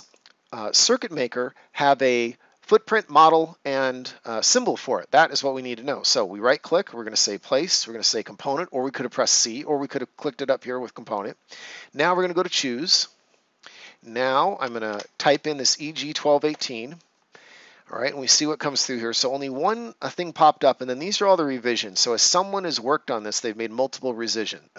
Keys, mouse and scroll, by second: 0.0 click, 5.1 click, 6.0 right click, 9.1 click, 12.1 click, 14.8 ctrl+v, 16.4 Return, 21.9 click.